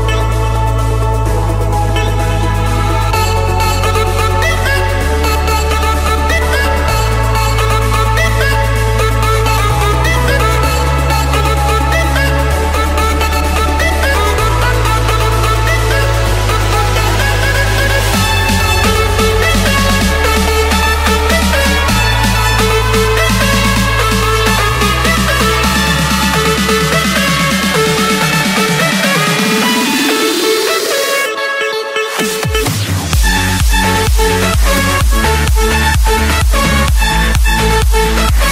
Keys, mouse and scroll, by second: 2.8-3.9 drag, 4.1-5.2 drag, 6.1 Return, 8.8-9.8 drag, 10.7-11.9 middle drag, 12.5-13.6 drag, 14.4 middle click, 15.5-16.8 typing, 16.8 Return, 20.6-21.7 drag, 21.8-23.0 drag, 23.1-24.3 drag, 27.4-27.8 typing, 29.9 Return, 32.2-33.3 drag, 33.5-34.7 drag, 36.7-37.9 drag, 36.9-38.5 typing.